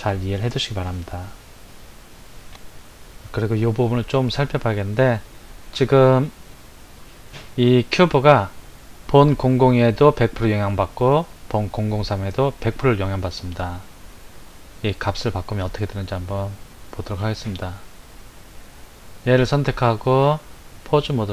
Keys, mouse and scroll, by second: 18.9 click, 20.2-21.3 drag.